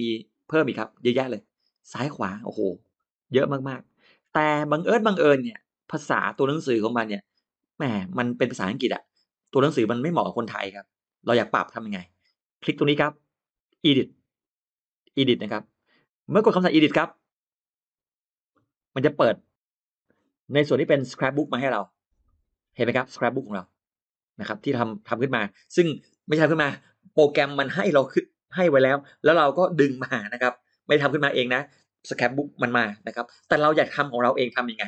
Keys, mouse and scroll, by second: 0.3 click, 0.8 click, 2.3 click, 2.6 click, 3.1 click, 3.4 click, 4.2 click, 4.6 click, 5.0 click, 5.2 click, 5.4 click, 17.3 click, 19.0 click.